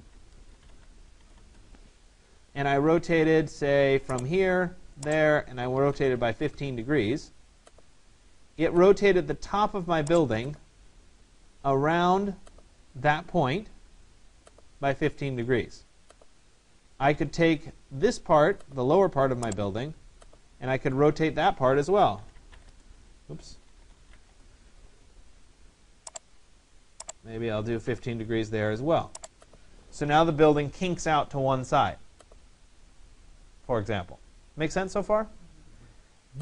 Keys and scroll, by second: 0.0 BackSpace, 5.4 1, 6.0 5, 22.3 Return, 27.9 5.